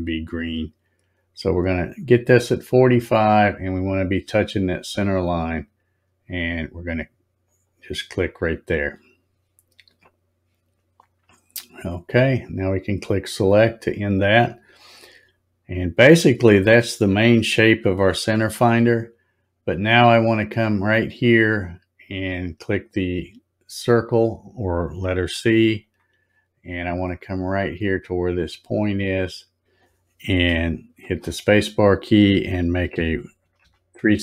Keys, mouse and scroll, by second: 7.4 click, 13.0 click, 15.4 scroll up 1, 16.3 scroll down 2, 17.8 scroll up 1, 25.8 click, 26.9 scroll up 2, 27.1 scroll down 4, 27.7 scroll up 4, 29.6 click, 31.0 space.